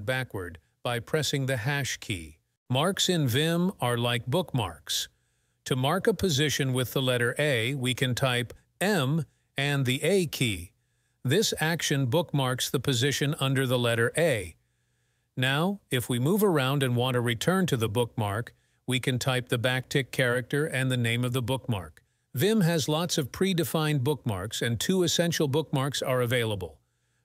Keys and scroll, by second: 2.0 3, 8.7 m, 9.1 a, 10.3 k, 11.3 k, 12.0 b, 12.9 j, 19.7 `, 20.8 a, 26.5 `.